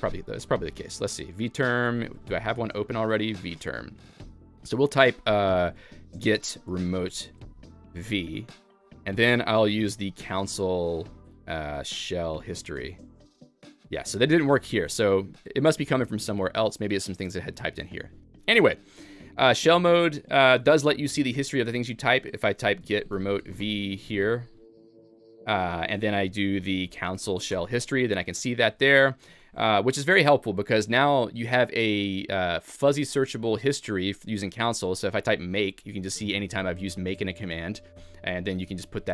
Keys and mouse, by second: 2.7 m.